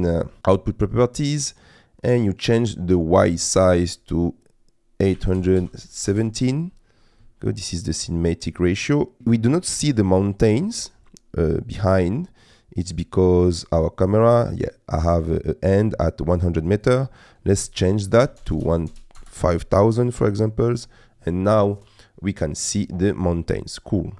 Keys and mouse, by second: 3.6-6.1 drag, 9.0 click, 13.5 click, 16.9-19.2 drag, 18.5 KP_0.